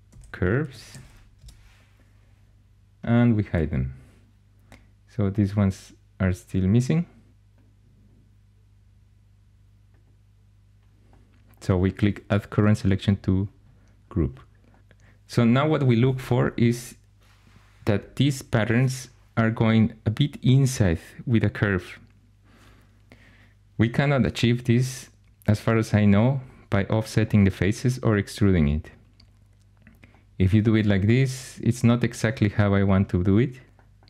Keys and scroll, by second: 0.0-1.3 typing, 23.8 3.